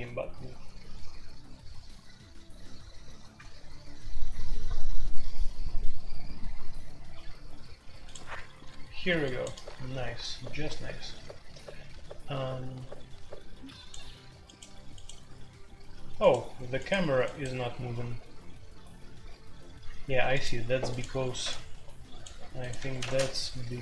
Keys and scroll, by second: 0.0-23.8 typing, 22.7 Escape, 23.0 Tab.